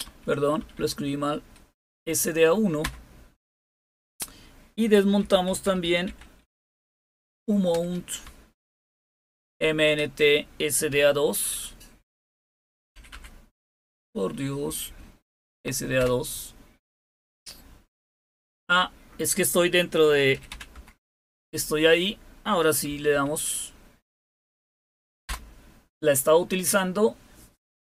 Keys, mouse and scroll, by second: 0.0 Up, 0.5 Left, 0.7 Left, 1.7 a, 1.9 Delete, 2.7 Return, 4.8-6.5 typing, 6.7 Tab, 7.7-10.8 typing, 12.4-16.4 typing, 14.6 Delete, 20.0-20.9 typing, 22.8 Up, 23.0 Up, 25.2 Return.